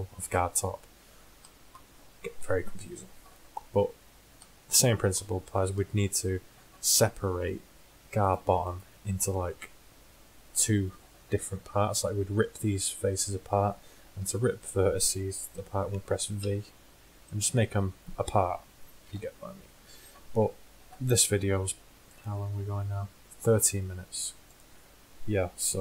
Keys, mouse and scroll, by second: 2.4 KP_1, 5.8 KP_1, 9.4 click, 10.3 middle click, 14.2 Tab, 16.5 v, 19.1 ctrl+z, 25.6 click.